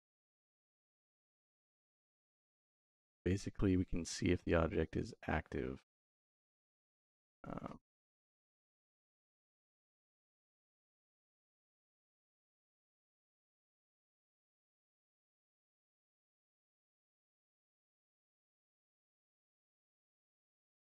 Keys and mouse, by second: 0.3 click, 1.7 click, 5.9 middle click, 11.7 click, 14.6 click, 18.5 click, 18.9 click, 19.7 shift+v.